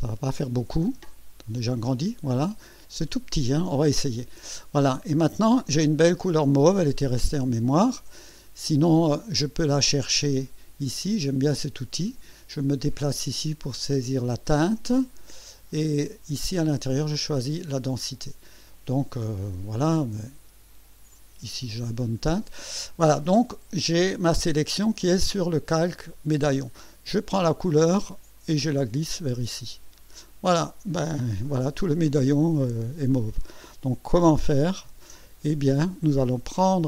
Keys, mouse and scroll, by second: 0.0 click, 1.0-1.4 ctrl+scroll up 2, 1.7-2.2 ctrl+scroll down 1, 3.2 ctrl+scroll down 1, 7.5 ctrl+scroll down 2, 9.4 click, 11.2 click, 21.1 click, 27.7-29.3 drag, 34.9 ctrl+shift+a.